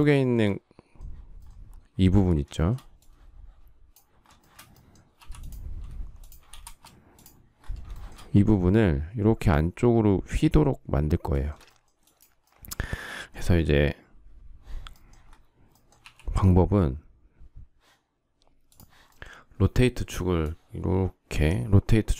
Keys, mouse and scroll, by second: 0.1 shift+middle click, 0.2 shift+double middle click, 2.6 shift+middle click, 4.2 shift+middle click, 5.0 m, 6.1 shift+click, 6.5 space, 8.0 shift+middle click, 11.4 shift+middle click.